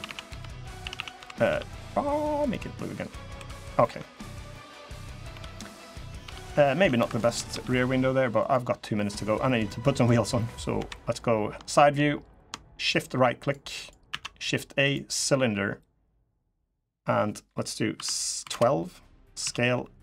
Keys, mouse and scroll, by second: 0.6 a, 0.7 a, 0.9 b, 1.2 g, 2.6 middle click, 3.1 2, 3.3 middle click, 3.6 Tab, 4.0-4.3 scroll down 2, 4.2 middle click, 4.6-5.1 scroll up 3, 5.1 Tab, 5.3 middle click, 5.8 middle click, 6.0 Tab, 6.5 Tab, 6.7 2, 6.8 click, 7.1 g, 8.4 scroll down 1, 8.7 middle click, 9.1-10.3 scroll down 3, 9.4 middle click, 10.5 KP_3, 11.5 shift+middle click, 11.8 scroll up 5, 12.7 shift+right click, 13.1 shift+right click, 13.6 shift+right click, 13.8 shift+a, 16.6 click, 19.2 s.